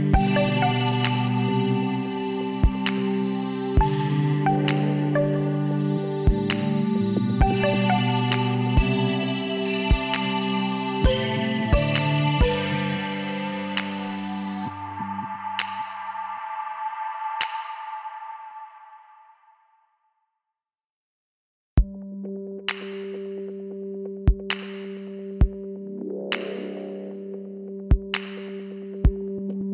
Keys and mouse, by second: 3.4 middle click, 4.5 middle click, 5.9-7.6 drag, 7.9-9.5 drag, 11.4-13.1 middle drag, 16.8-18.2 drag, 18.9 right click, 21.9 s, 23.4-26.0 drag, 26.0 middle click, 26.6 KP_1, 27.4 z.